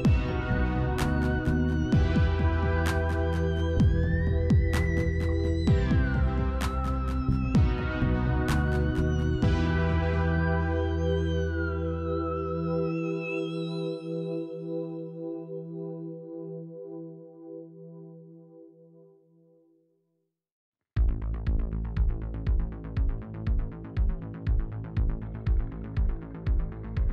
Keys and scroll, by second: 0.1 ctrl+z, 6.1 ctrl+z, 19.1 f.